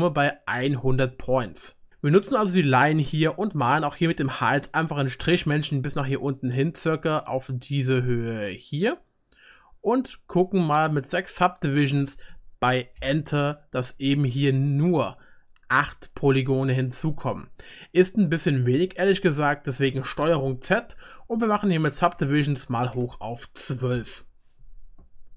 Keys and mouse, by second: 7.9-13.0 middle drag, 13.0-17.9 drag, 20.2 ctrl+z.